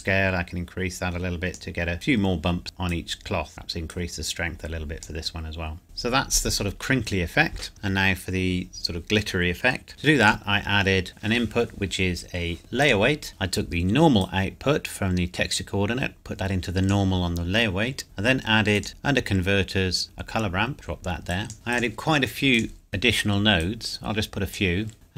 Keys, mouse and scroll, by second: 3.0 click, 4.1 click, 7.7 shift+middle click, 9.9 click, 13.1 click, 14.4 click, 20.7 click.